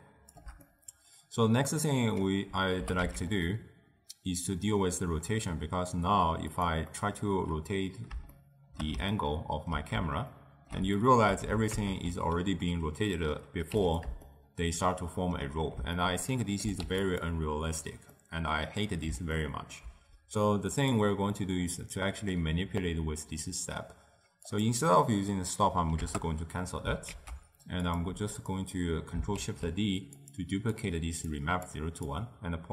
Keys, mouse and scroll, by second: 0.8-2.9 middle drag, 2.9 g, 7.1-11.8 middle drag, 11.8 ctrl+alt+KP_0, 13.8 q, 14.3-16.9 shift+middle drag, 16.9 q, 18.2-20.8 middle drag, 20.8 click, 21.5-24.6 middle drag, 24.6-27.2 drag, 27.2 ctrl+a, 28.5 click, 29.4 ctrl+shift+d, 30.9 click, 31.4-32.7 drag.